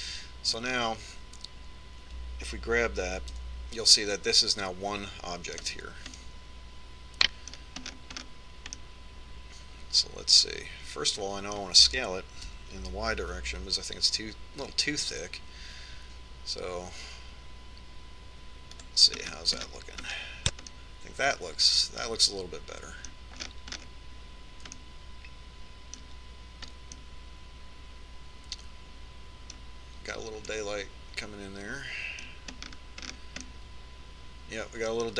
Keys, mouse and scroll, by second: 0.9-4.1 middle drag, 4.9 g, 7.7-12.2 middle drag, 14.1 s, 20.9-24.2 middle drag, 25.0-31.0 middle drag, 25.0-25.4 scroll up 1, 32.2-33.9 middle drag, 34.2-35.1 middle drag.